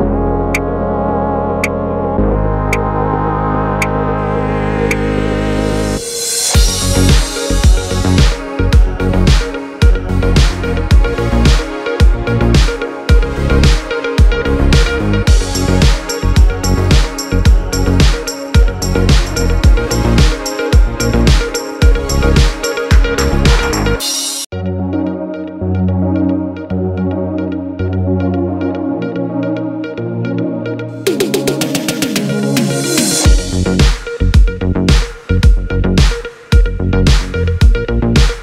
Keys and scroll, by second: 28.1 space, 35.0 space.